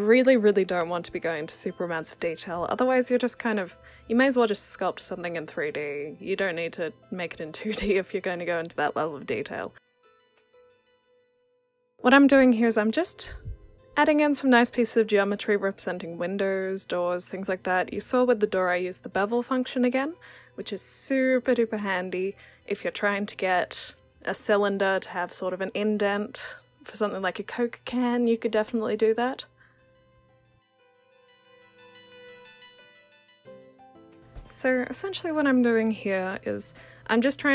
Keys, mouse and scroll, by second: 0.0 alt+click, 0.3 r, 0.9 click, 1.3 w, 1.7-2.1 alt+drag, 2.1 r, 2.2 click, 2.5 click, 3.2-3.5 alt+drag, 3.5 w, 4.3-4.7 alt+drag, 4.9 click, 6.2 alt+click, 7.2 click, 8.5 alt+click, 9.2 e, 9.3 alt+click, 10.5 click, 10.8 click, 11.7 alt+click, 12.8 alt+click, 13.3 alt+right click, 13.5 alt+click, 14.3 click, 15.1 w, 15.2 click, 15.8 alt+click, 16.0 e, 16.2 click, 16.9 alt+click, 17.2 w, 17.6 alt+click, 18.0 click, 18.1 alt+click, 18.8 alt+click, 19.3 alt+click, 19.8 e, 20.0 click, 20.3 alt+click, 20.6 alt+right click, 20.8 alt+click, 21.6 alt+click, 22.7 ctrl+c, 23.0 ctrl+v, 23.7 click, 24.9 alt+click, 25.5 click, 26.1 alt+click, 26.6 e, 27.0 click, 27.3 alt+click, 27.8-30.2 typing, 28.1 click, 28.3 alt+click, 28.5 click, 28.7-29.1 alt+drag, 29.3 alt+drag, 29.8 click, 30.3 click, 30.6 alt+click, 30.8 alt+click, 31.9-32.2 alt+drag, 32.3 alt+click, 32.5 alt+right click, 32.6-33.0 alt+drag, 33.2-33.6 drag, 34.1 alt+click, 34.3 e, 34.4 r, 34.5 alt+click, 34.6 alt+right click, 35.1 w, 35.4 alt+click, 35.7 alt+drag, 36.1 alt+click, 36.7 w, 36.9 r, 36.9 click.